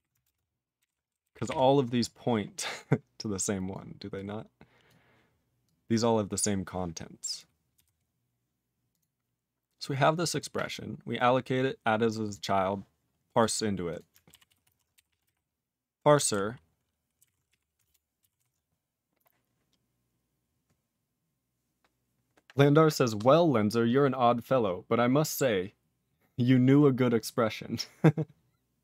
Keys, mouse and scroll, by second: 7.7 q, 8.1-8.8 scroll up 2, 8.8 click, 9.0 click, 10.2 click, 10.3 click, 11.2 click, 11.2 click, 12.2 click, 12.3 click, 13.3 click, 13.5 click, 13.8 click, 13.9 click, 14.4 ctrl+s, 16.3 ctrl+g, 17.8 ctrl+Return, 18.3 ctrl+s.